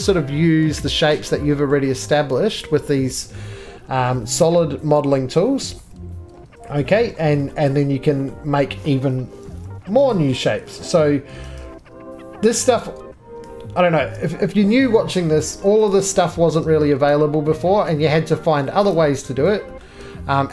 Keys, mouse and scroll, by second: 1.9 middle click, 1.9-2.4 scroll up 2, 1.9 2, 2.7-3.2 scroll down 2, 3.4 middle click, 3.6 scroll down 1, 3.6-4.1 scroll, 4.6 middle click, 5.8 2, 6.7 2, 8.2 middle click, 8.4 scroll down 2, 9.4 2, 10.1 right click, 10.5 2, 12.6 click, 12.9 middle click, 13.0 scroll, 19.9 click, 19.9 middle click, 19.9 scroll up 2.